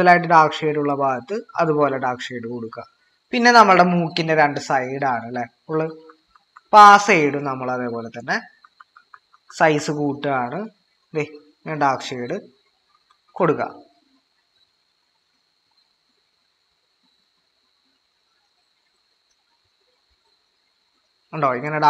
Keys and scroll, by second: 5.9-6.3 typing, 8.6-9.6 typing, 12.9 typing.